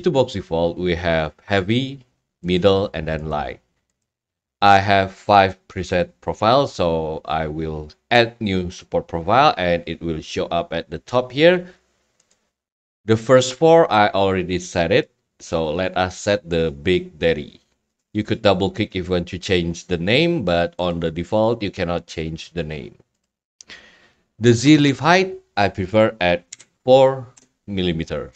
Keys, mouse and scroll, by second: 24.9 click.